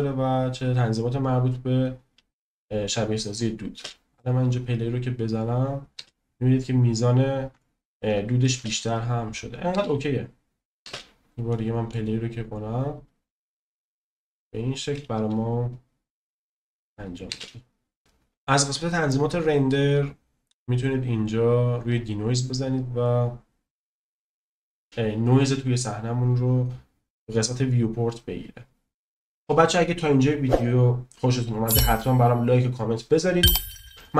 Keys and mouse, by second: 2.6 click, 3.8 space, 5.9 space, 7.6-7.9 shift+middle drag, 8.7 space, 9.9 space, 10.8 space, 11.5-11.9 drag, 17.3 space, 21.9 click.